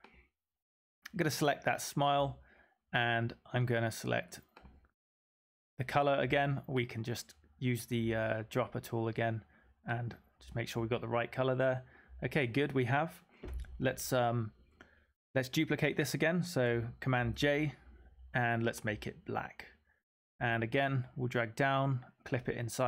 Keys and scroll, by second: 17.1 super+j.